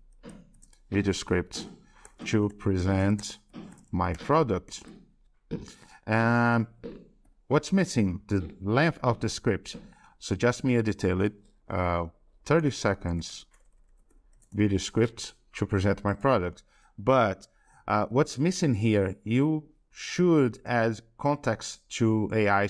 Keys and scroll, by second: 1.1 ctrl+Right, 1.2 ctrl+Right, 21.0 alt+Tab, 22.4 alt+Tab.